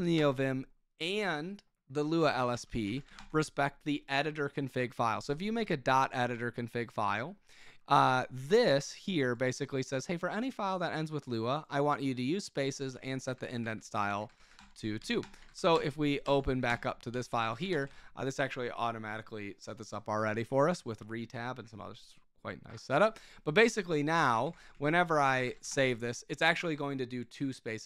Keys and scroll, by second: 0.1 Return, 1.9-3.5 typing, 12.9 Escape, 13.2-15.6 typing, 15.2 Return, 15.7 Up, 16.2 Up, 16.8-18.9 typing, 23.9 Escape, 24.0-26.1 typing.